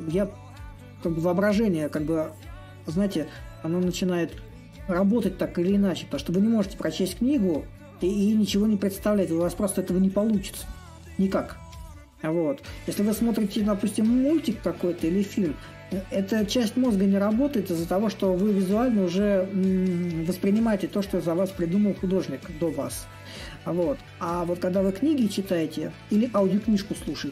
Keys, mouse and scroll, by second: 5.1-10.2 drag, 10.2-15.3 drag, 15.3-20.4 drag, 22.3-27.3 drag.